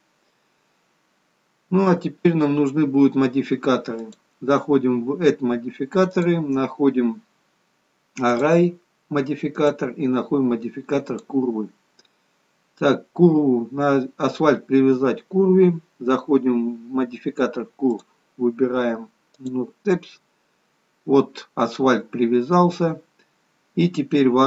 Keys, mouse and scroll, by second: 4.1 click, 6.1 click, 9.6 click, 13.0-13.9 scroll down 3, 15.8-17.9 scroll down 2, 17.9 click, 20.8-22.4 scroll up 4, 22.4 scroll down 1, 22.6-23.4 scroll down 2, 23.4-23.9 scroll up 1, 24.1-24.4 scroll up 1.